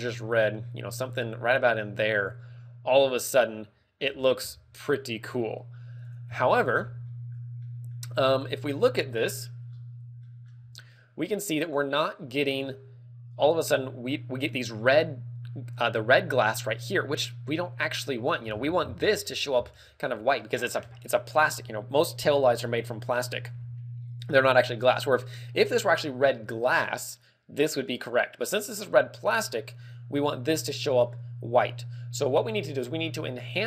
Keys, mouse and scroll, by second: 6.0 click, 6.2 Tab, 6.6-7.0 scroll down 5, 7.0 middle click, 7.5 middle click, 8.1 scroll up 2, 8.4 middle click, 11.5 click, 11.9-12.3 scroll down 5, 12.3 middle click.